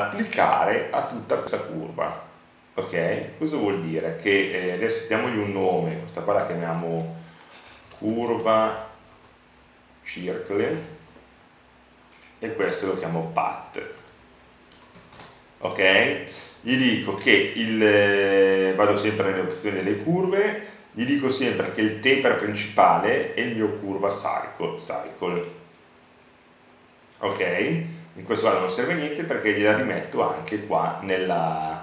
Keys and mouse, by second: 1.6-7.7 drag, 12.4 middle click, 13.7 middle click, 24.1 s, 29.0 click.